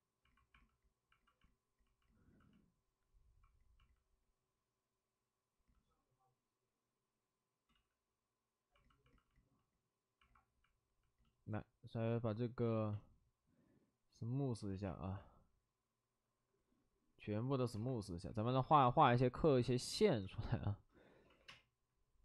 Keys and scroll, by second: 7.6 ctrl+z, 12.6 ctrl+z, 20.9-21.9 typing.